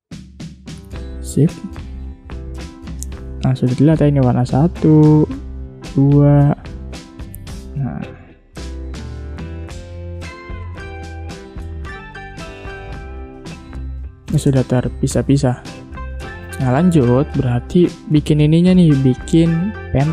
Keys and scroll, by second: 0.4 v, 3.7 ctrl+z, 5.6 ctrl+z, 7.9 ctrl+z, 9.7 Delete, 13.1 ctrl+z, 14.5 space.